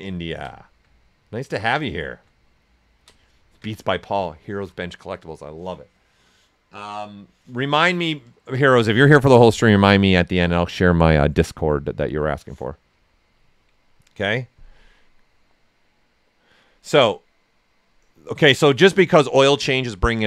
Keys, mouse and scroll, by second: 1.8 alt+right click, 2.3 ctrl+right click.